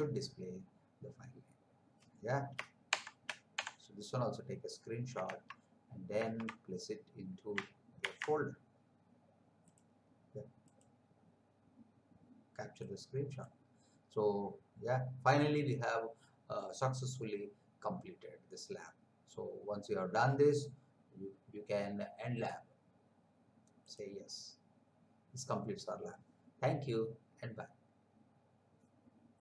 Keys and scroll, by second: 2.9 shift+Print, 3.5 Print, 5.5 alt+Tab, 8.0 ctrl+v.